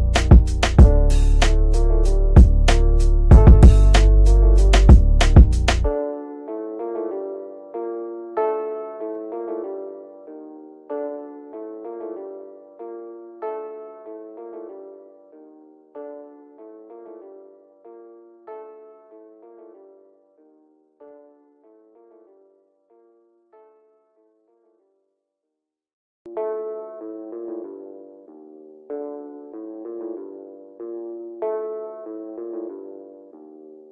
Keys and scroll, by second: 0.3 shift+F2, 14.5 shift+F2, 14.8 Escape, 28.5 F3, 29.3 shift+F2, 29.5 Escape, 29.9 F9.